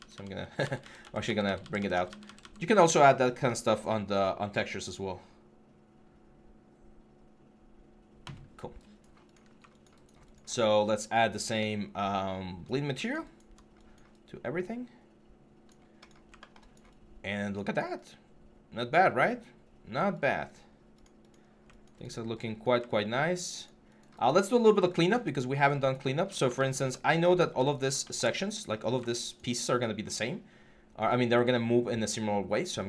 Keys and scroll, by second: 0.4 ctrl+z.